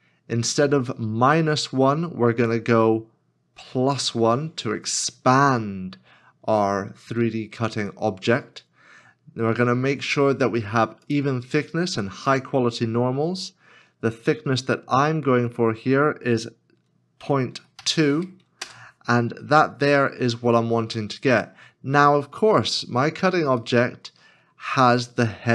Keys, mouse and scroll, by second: 17.2 KP_Decimal, 17.8 KP_2, 18.6 Return, 21.0 middle click, 22.7 scroll up 1, 23.6 middle click, 25.1 scroll down 1.